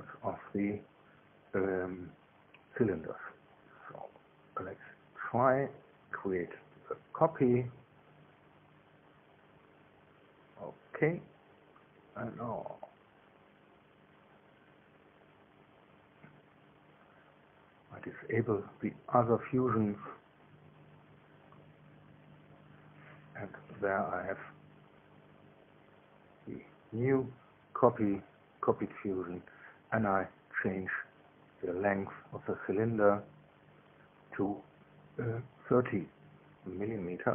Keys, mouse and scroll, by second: 6.0 click, 9.2 ctrl+c, 10.6 click, 11.9 ctrl+v, 13.2 click, 16.1 click, 16.6 middle click, 16.6-17.4 scroll down 4, 17.2 middle click, 20.0 shift+click, 21.0 space, 27.3 click, 28.0 scroll down 1, 30.6 click, 32.3 scroll down 1, 32.9 scroll up 1.